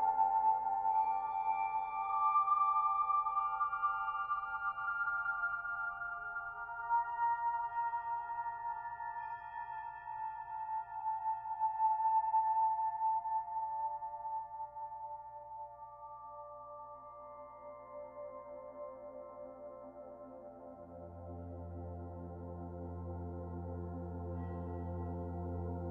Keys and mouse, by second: 1.2 Tab, 1.6 alt+click, 3.2 /, 4.2-6.9 alt+drag, 6.9-9.3 alt+middle drag, 10.8 alt+click, 11.6 Tab, 12.9 a, 14.6 click, 19.2-23.9 drag, 24.7 s.